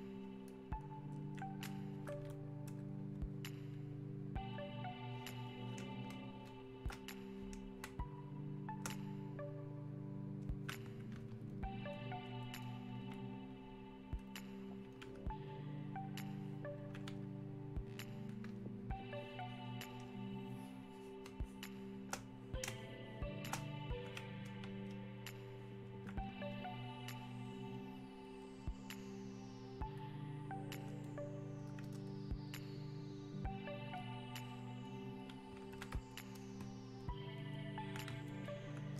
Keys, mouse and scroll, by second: 0.7-3.7 shift+drag, 3.7 shift+click, 4.6-6.1 ctrl+drag, 6.1 ctrl+space, 11.5 ctrl+click, 16.3-19.4 alt+drag, 19.4-21.3 ctrl+drag, 21.3 ctrl+space, 25.5-37.0 alt+drag.